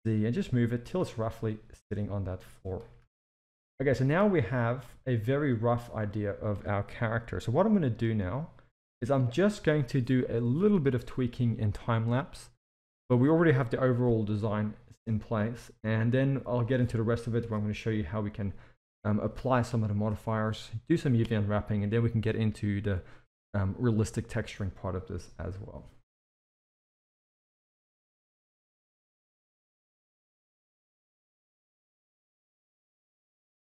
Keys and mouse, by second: 1.1-2.4 middle drag, 3.0 KP_1, 3.3 alt+a, 3.9 shift+middle click, 4.6 click, 6.0-6.4 shift+middle drag, 26.2-28.7 typing, 26.2 shift+middle drag, 26.4 Tab, 26.8 click, 27.8 click, 28.6 click, 29.3 shift+middle click, 29.5 Tab, 29.8 Tab, 30.1 ctrl+r, 30.3 drag, 30.5 g, 30.9 click, 31.0 g, 31.4 click, 31.6 g, 32.4 click, 32.7 click, 32.8 g, 33.5 shift+middle click.